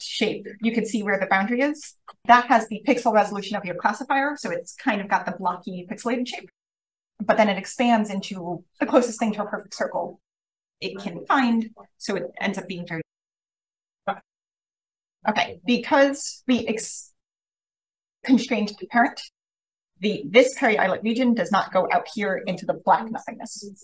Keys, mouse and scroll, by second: 11.4 scroll down 1, 11.6-12.9 scroll up 2, 12.9-13.5 scroll up 1, 13.5 click, 14.3 click, 14.9-19.8 scroll up 1, 19.8-23.8 scroll up 1, 20.4 click, 20.6 click.